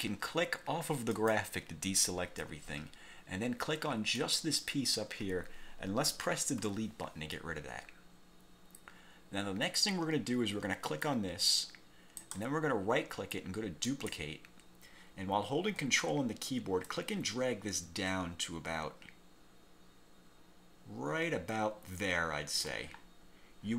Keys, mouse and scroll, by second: 1.3 click, 4.3 click, 6.8 Delete, 11.0 click, 12.4 right click, 14.0 click, 17.0-23.0 ctrl+drag, 23.1-23.6 ctrl+scroll down 3.